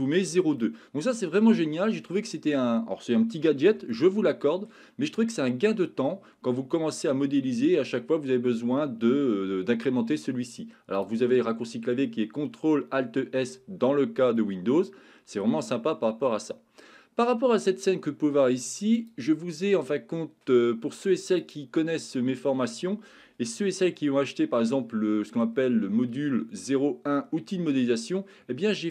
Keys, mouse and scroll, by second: 0.6-1.7 middle drag, 3.9 shift+middle click, 5.2 middle click, 11.0-13.4 drag, 14.4-15.5 middle drag, 20.8 click, 24.6 shift+middle click.